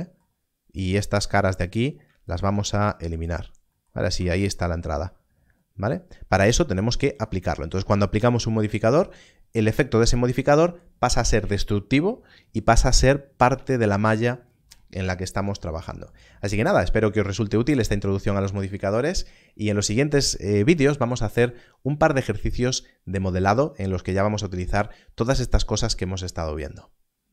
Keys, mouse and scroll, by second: 1.7 alt+click, 2.6 x, 3.2 click, 4.1 Tab, 4.9-5.5 scroll down 1.